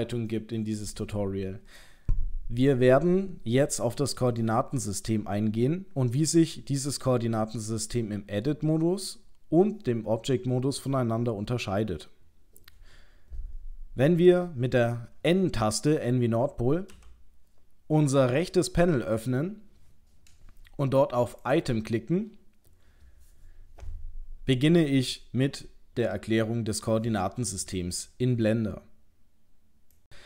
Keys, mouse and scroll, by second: 16.9 n, 21.4 click.